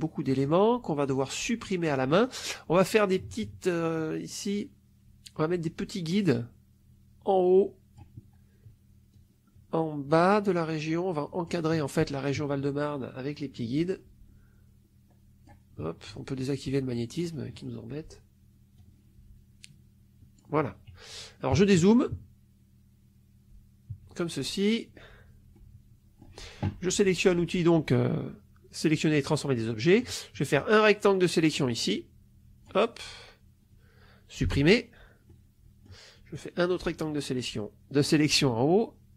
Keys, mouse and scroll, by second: 0.2 middle click, 6.2-8.1 drag, 9.0-11.5 drag, 13.3-15.5 drag, 17.1 click, 18.7-20.5 drag, 21.4 KP_Subtract, 23.8 -, 25.5 middle click, 29.8 click, 30.5-32.7 drag, 34.3 Delete, 35.2 middle click, 36.2-39.1 drag.